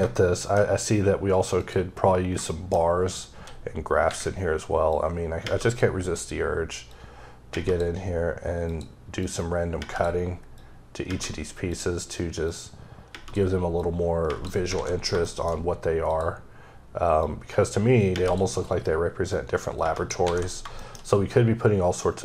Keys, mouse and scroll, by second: 0.1 shift+middle click, 1.6 click, 2.0 scroll up 1, 2.5 middle click, 2.8-3.4 scroll up 3, 3.4 d, 4.9 click, 6.0-6.9 scroll down 2, 6.9 click, 8.7 click, 9.2 click, 10.6 click, 11.7 click, 12.5 click, 13.8 click, 15.0 scroll down 2, 15.3 shift+middle click, 16.1 click, 17.2 click, 19.3 click, 20.5-20.8 scroll down 2, 20.8 shift+middle click.